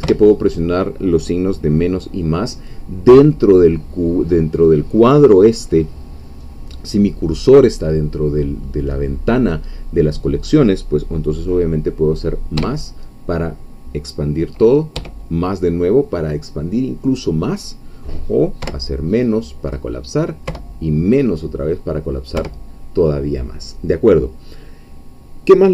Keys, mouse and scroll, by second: 0.0 -, 18.6 -, 22.4 -.